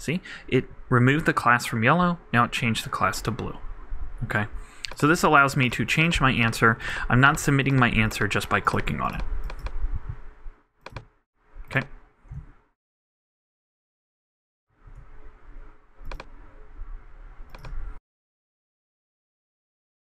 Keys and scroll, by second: 12.4 super+Tab, 14.7 super+r.